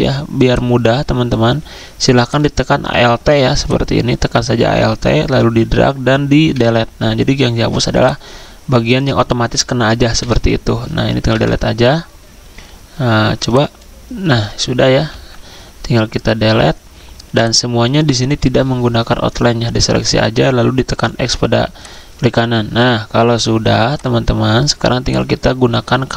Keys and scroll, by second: 6.5 Delete, 10.2 Delete, 11.2 Delete, 14.4 ctrl+z, 15.1 Delete.